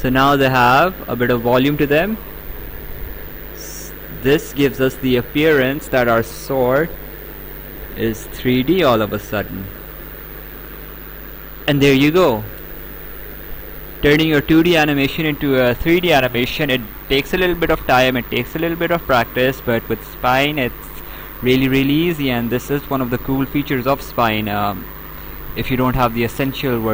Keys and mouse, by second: 0.4 right click, 2.4 click, 4.8 right click, 7.2 click, 8.4 click, 9.6 Escape, 11.1 right click.